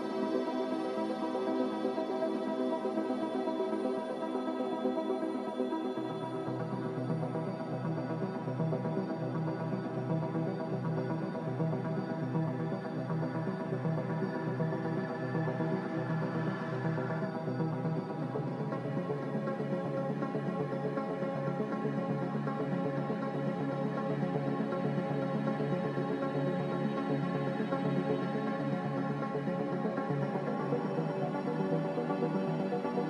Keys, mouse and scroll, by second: 10.2 click, 16.0 z, 19.3 a, 22.8-23.6 typing, 23.9 Return, 25.8 z, 28.6 a, 30.8-32.2 typing.